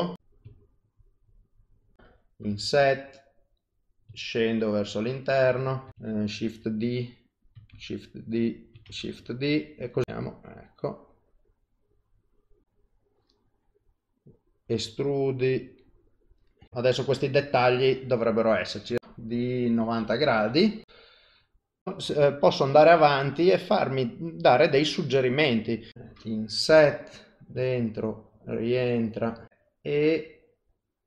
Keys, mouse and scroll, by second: 2.0 click, 6.0 ctrl+middle click, 6.5 shift+d, 7.7 shift+d, 8.9 shift+d, 16.6 middle click, 16.7 KP_Divide, 20.8 ctrl+a, 20.8 middle click, 21.8 click.